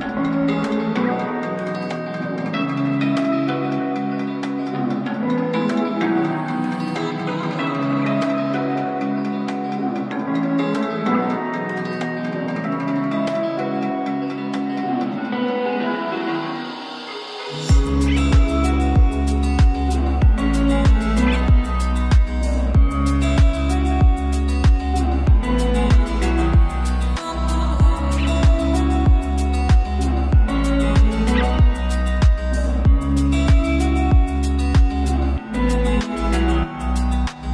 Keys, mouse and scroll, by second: 3.6 click, 9.0 click, 9.0-11.7 drag, 14.2 click, 18.5 Return, 20.1 click, 21.5 Return, 24.7 click, 26.0 Return, 30.4 click.